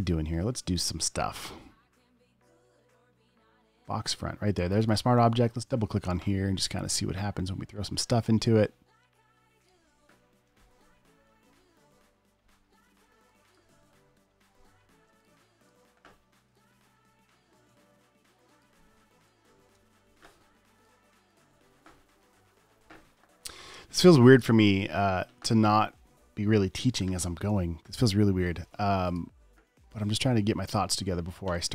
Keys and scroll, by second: 13.2 alt+space, 14.5 super+0, 15.3 space, 20.0 super+a, 20.1 v, 22.8 super+s, 28.8 space.